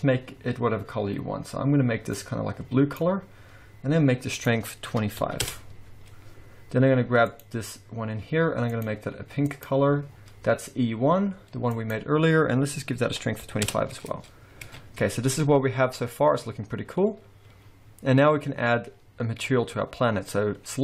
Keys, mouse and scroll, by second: 2.3 click, 4.3 click, 7.2 click, 8.7 click, 11.7 click, 14.6 alt+a, 16.1-17.6 scroll down 2, 17.9-19.0 scroll up 1.